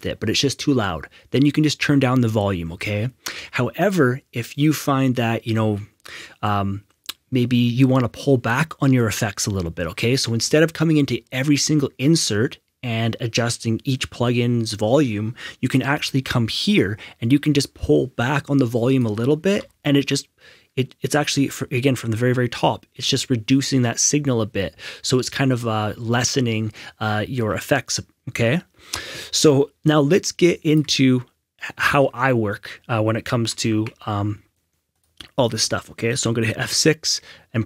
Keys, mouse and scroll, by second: 1.9 click, 15.8 F6, 17.8 click, 17.8 click, 19.5 F6, 30.7 click, 31.9 Escape, 33.4 Tab, 33.7 Tab, 34.9 click, 35.4 Escape, 36.5 F6.